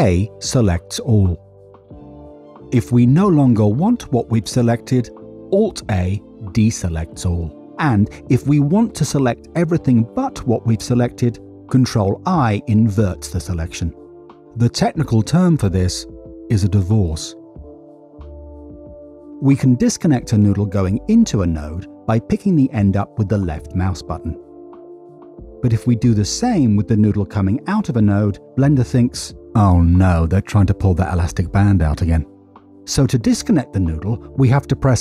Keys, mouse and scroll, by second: 1.5 a, 5.9 alt+a, 9.1 click, 12.4 ctrl+i, 17.9 middle click, 20.8 alt+a, 23.9 click, 28.3 click, 32.8 Escape.